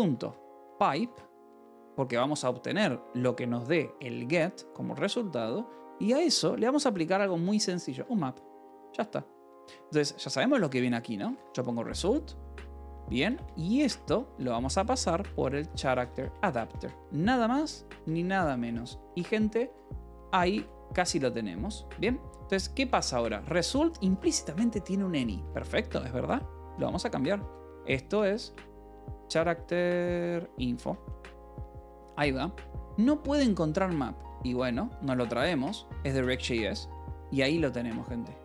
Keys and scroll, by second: 0.0-2.1 typing, 8.4 m, 8.9 (, 10.9-18.4 typing, 18.5 Escape, 19.6 ctrl+s, 19.6-21.5 typing, 22.9 l, 24.8 a, 25.5 space, 26.6-29.4 typing, 30.2 Return, 30.7 Escape, 31.7 h, 33.3 l, 33.6 a, 34.2 BackSpace, 34.5 p, 35.5 Return, 35.8 Escape, 36.8 ctrl+s, 36.9 j, 37.6 k.